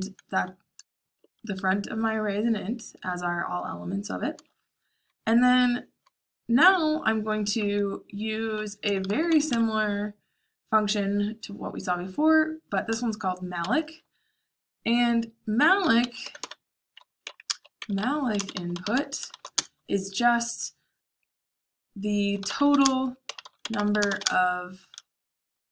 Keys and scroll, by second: 1.3 shift+a, 7.5-9.9 typing, 13.5 shift+9, 15.9-19.8 typing, 22.1-24.6 typing.